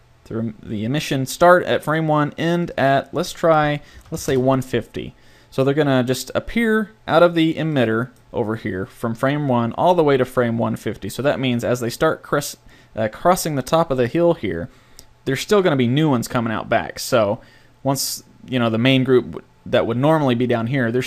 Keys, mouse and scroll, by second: 0.7 middle click, 2.6-4.5 middle drag, 7.8-9.8 middle drag.